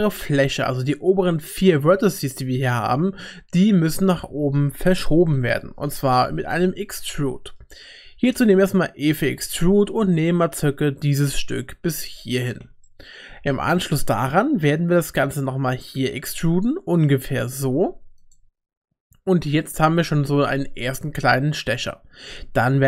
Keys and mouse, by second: 2.3 middle click, 2.9 click, 5.3 KP_1, 7.2 shift+click, 8.3 e, 13.0 shift+click, 15.5 e, 22.3 e.